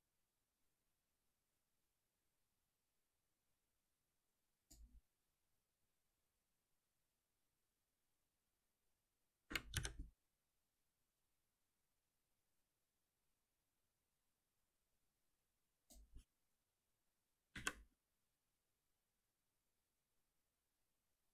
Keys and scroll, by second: 9.8 ctrl+alt+n, 17.5 ctrl+shift+Up.